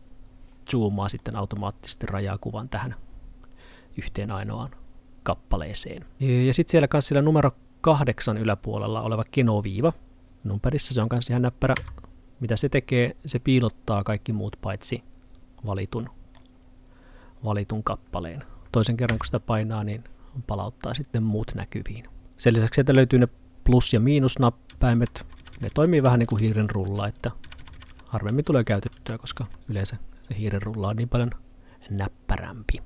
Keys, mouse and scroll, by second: 1.2 middle click, 13.7 middle click, 16.7-17.6 scroll down 1, 17.6-20.4 scroll up 1, 20.4-23.3 scroll down 1.